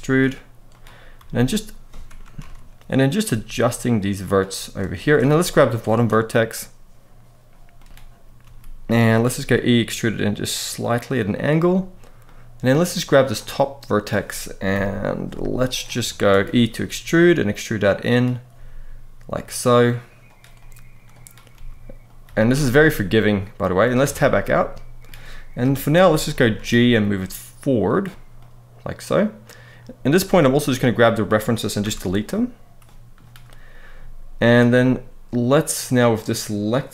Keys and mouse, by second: 0.9 f, 2.1 ctrl+z, 3.0 g, 4.0 click, 4.7 shift+middle click, 5.2 click, 8.2 g, 8.8 click, 9.1 e, 11.1 click, 12.0 middle click, 12.9 click, 13.3 middle click, 14.5 KP_1, 15.0 z, 15.8 shift+middle click, 16.4 e, 17.8 click, 18.3 e, 20.0 click, 20.3 click, 21.3 g, 21.8 click, 22.0 z, 22.6 middle click, 23.8 Tab, 24.2-24.8 middle drag, 25.4 KP_3, 26.0-26.4 shift+middle drag, 26.6 g, 27.6 click, 28.1-29.4 middle drag, 30.3 middle click, 31.6 Delete, 32.6-32.9 middle drag, 34.2 click, 34.5-35.8 middle drag, 36.8 click.